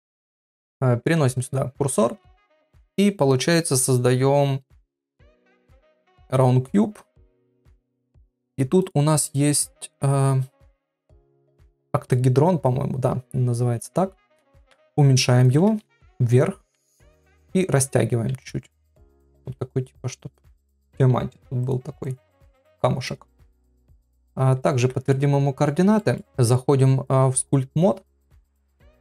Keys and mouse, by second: 2.0 shift+a, 8.4 click, 8.8-12.1 drag, 14.6 s, 15.7 g, 16.6 s, 18.7 click, 19.4 KP_1, 20.5 click, 20.6 g, 22.4 middle click, 23.6 click, 24.8 ctrl+a, 25.9 shift+middle click, 26.2 ctrl+Tab, 28.6-29.0 drag.